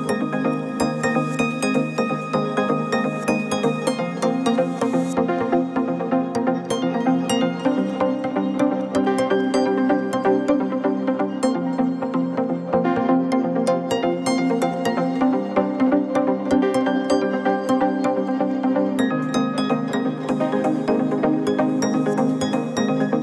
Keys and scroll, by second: 3.6 ctrl+z, 4.4 ctrl+c, 5.2 ctrl+shift+v.